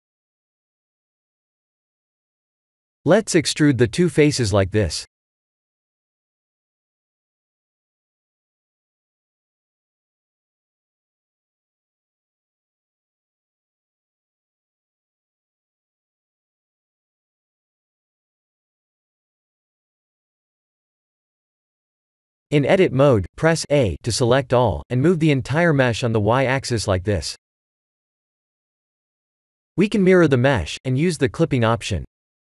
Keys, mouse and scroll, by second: 0.0 shift+click, 1.0 click, 3.0 middle click, 5.4 middle click, 5.8 middle click, 6.5 e, 12.6 KP_7, 14.0-14.7 scroll up 4, 14.7 shift+middle click, 15.8 click, 17.2 click, 21.4 Tab, 21.9-22.5 scroll down 4, 23.0 Tab, 24.0 a, 24.6 g, 29.2 click, 29.9 click.